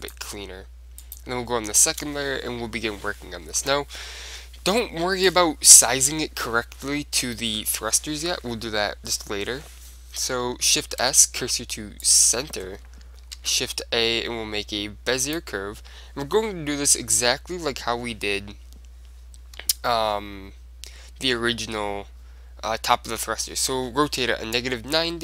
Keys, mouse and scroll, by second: 0.2-3.0 drag, 1.9-3.5 middle drag, 6.9-9.4 middle drag, 8.7 KP_7, 9.5-11.7 middle drag, 10.9 shift+s, 12.7-14.7 middle drag, 13.5 shift+a, 19.7 r.